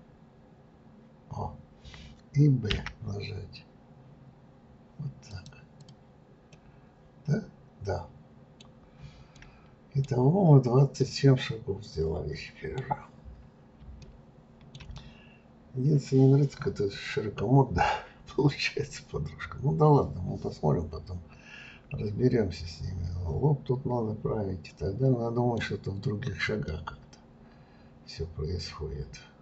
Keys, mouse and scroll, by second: 5.8 click, 6.5-8.7 middle drag, 8.7-9.3 scroll down 2, 9.3 middle click, 10.3-11.0 scroll down 2, 11.0-13.3 middle drag, 13.3-14.0 scroll up 1, 14.0-18.0 shift+middle drag, 26.7-29.4 middle drag.